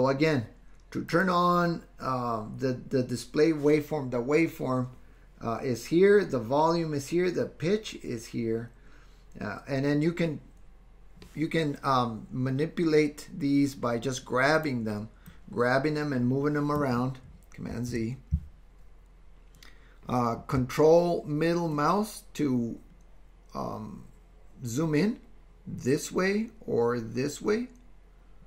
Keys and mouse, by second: 15.3-16.9 drag, 17.9 super+z, 21.7-28.4 ctrl+drag.